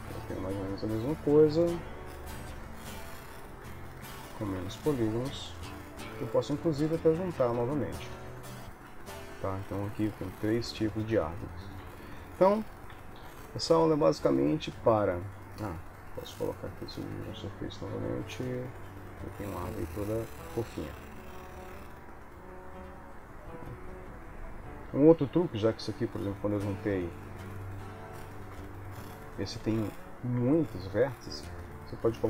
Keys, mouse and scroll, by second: 0.0 KP_1, 1.8 click, 2.8 ctrl+middle click, 3.6 ctrl+s, 4.1 Tab, 4.7 Tab, 5.7 shift+middle click, 9.6 ctrl+s, 10.3 shift+click, 11.9 ctrl+s, 13.2 ctrl+j, 15.9 click, 19.4 middle click, 22.6 ctrl+s, 25.9 ctrl+z, 28.0 ctrl+z, 28.9 click, 29.7 Tab, 30.5 Tab, 31.6 click.